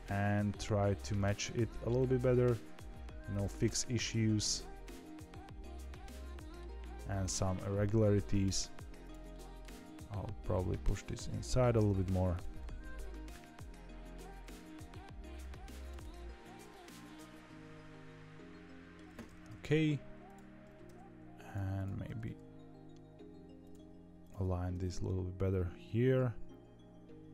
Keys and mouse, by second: 2.1 g, 4.0-6.5 middle drag, 7.4-8.5 middle drag, 9.2 middle click, 9.7 g, 12.5-14.1 middle drag, 14.4 g, 15.9-18.9 middle drag, 19.4 KP_3, 20.2 click, 20.6 g, 22.0 g, 24.2 click.